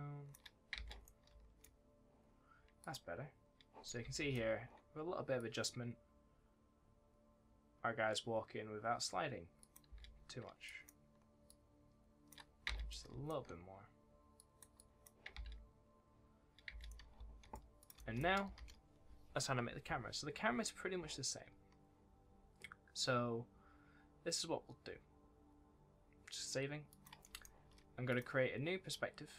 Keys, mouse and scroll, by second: 0.7 space, 1.0 right click, 1.2 d, 2.7 click, 3.7-4.6 typing, 3.8 right click, 5.3 click, 8.6-9.0 scroll down 1, 9.0-9.5 scroll up 1, 9.5 click, 9.8 space, 10.6 click, 11.4 shift+click, 12.6 space, 12.8 right click, 13.0 a, 14.3 click, 15.3 space, 16.8 right click, 17.1 a, 17.7 click, 17.9 right click, 18.5 ctrl+s, 26.8 click, 27.2 s, 28.0 click.